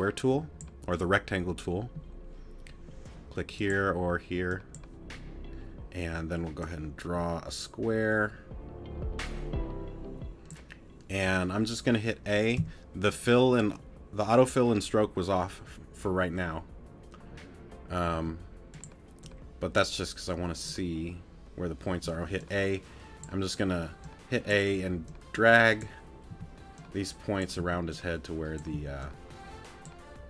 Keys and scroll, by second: 12.6 t, 18.1 t, 21.9 a, 26.3 t, 27.6 a, 28.7 a.